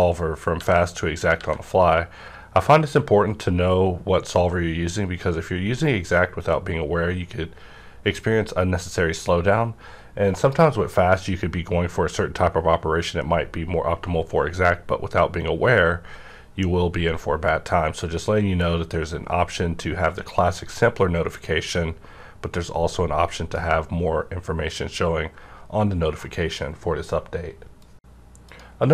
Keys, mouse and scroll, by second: 17.5 alt+e, 17.5-25.9 drag.